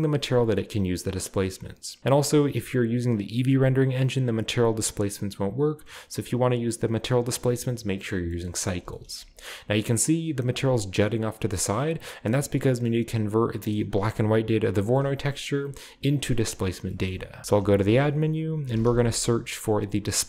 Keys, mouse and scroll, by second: 8.1-9.8 scroll down 1, 9.8-10.8 scroll down 1, 10.8 scroll down 1, 11.1-12.0 scroll up 1, 12.0 scroll down 1, 12.1-13.6 scroll up 1, 13.6 click, 14.0 g, 14.5 click, 14.8-16.5 middle drag, 14.8-15.3 scroll down 1, 15.3-16.5 scroll up 1, 16.7-17.4 scroll down 1, 17.1 middle click, 17.4 shift+a, 17.7 shift+click, 18.6 typing, 20.1 click.